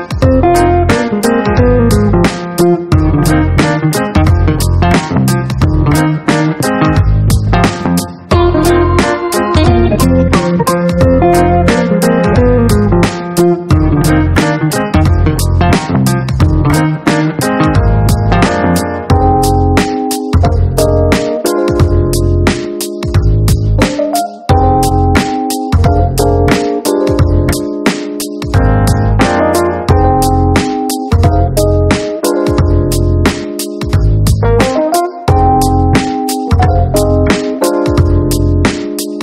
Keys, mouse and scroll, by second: 6.0 click, 7.7 click, 9.7-11.1 right drag, 14.2-15.7 drag, 16.1 shift+middle click, 18.0-19.3 drag, 20.3 click, 21.8 click, 22.4 ctrl+click, 22.8 ctrl+d, 25.1 click, 28.1 click, 33.1 click, 38.6 click.